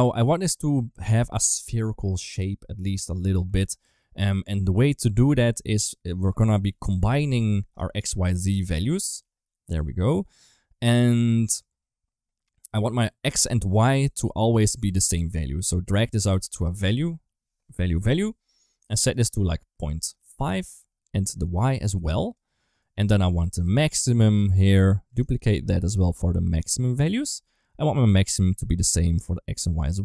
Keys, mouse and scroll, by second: 4.1 click, 5.9-8.5 drag, 8.9 click, 9.6 click, 11.1 middle click, 13.4 click, 14.2 click, 14.7 middle click, 15.5-18.7 drag, 19.0-20.1 drag, 21.5 click, 22.7 middle click, 23.1 click, 23.5 shift+d, 24.9 click, 25.3 shift+d, 26.6-27.2 drag, 27.8-28.4 drag, 28.8-29.5 drag.